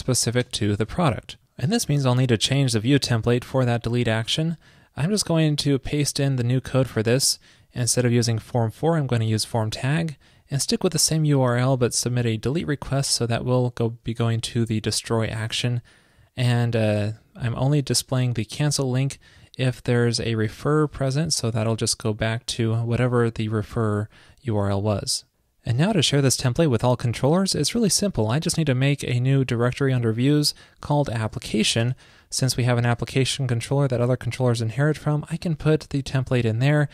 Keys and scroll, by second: 1.3 super+s, 5.6 super+a, 6.5 super+v.